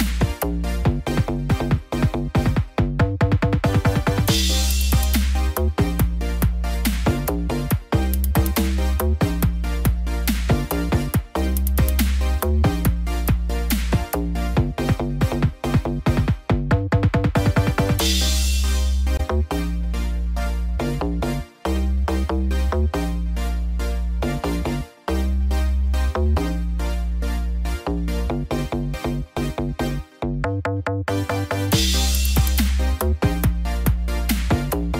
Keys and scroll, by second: 23.8 ctrl+t.